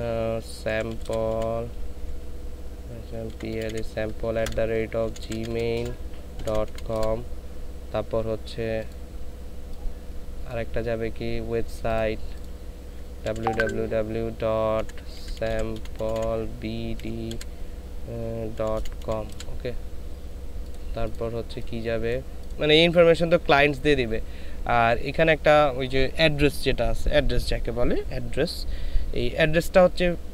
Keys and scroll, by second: 0.9-2.0 typing, 3.3-6.6 typing, 8.8 typing, 13.3 w, 13.4 w, 13.5 w, 15.1-17.4 typing, 18.5-19.3 typing.